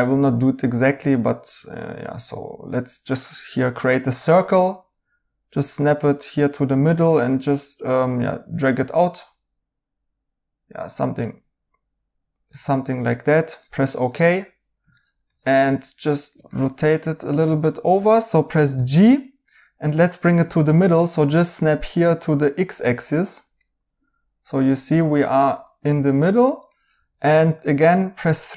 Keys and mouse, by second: 14.1 right click, 18.7 g, 23.5 right click, 26.4 right click, 26.9 3, 27.9 right click.